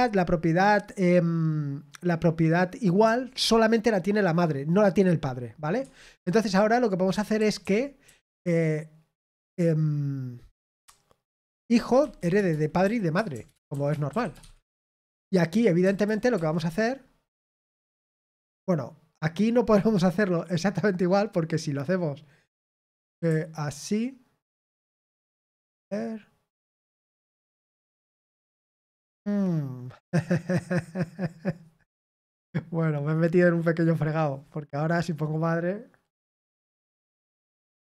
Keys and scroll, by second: 13.6-14.9 typing, 18.2 k, 24.0-25.3 typing.